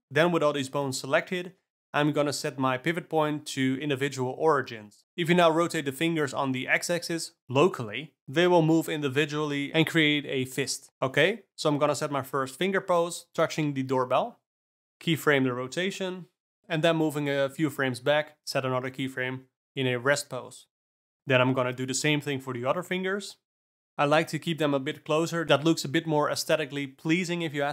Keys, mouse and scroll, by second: 5.0 ctrl+r, 6.6 r, 11.3 shift+click, 11.9 shift+click, 12.3 r, 14.9 ctrl+z, 17.8 Down, 17.9 Left, 18.4 alt+r, 18.7 Left, 19.0 alt+r, 19.8 KP_0, 19.9 space, 20.6 space, 21.1 shift+click, 22.0 Up, 22.2 Left, 22.3 Left, 22.5 r, 23.3 scroll up 1, 23.4-23.8 middle drag, 23.8 r, 25.3 ,, 25.5 ., 26.7 alt+a, 26.9 click, 27.3 r.